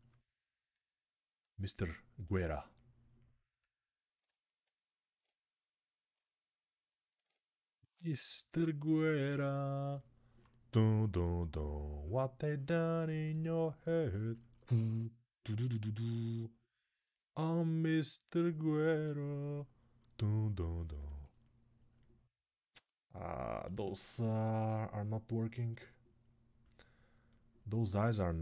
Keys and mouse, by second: 0.0 middle click, 0.5-15.3 drag, 17.0 middle click, 17.7-21.7 drag, 21.7-24.5 ctrl+alt+right drag, 26.4 middle click, 27.0-28.4 drag.